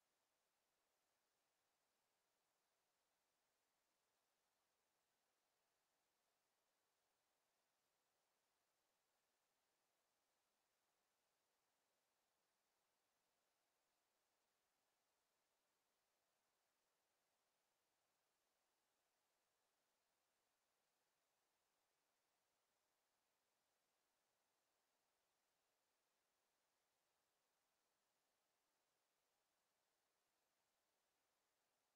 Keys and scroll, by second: 1.1 5, 1.4 0, 1.7 Return.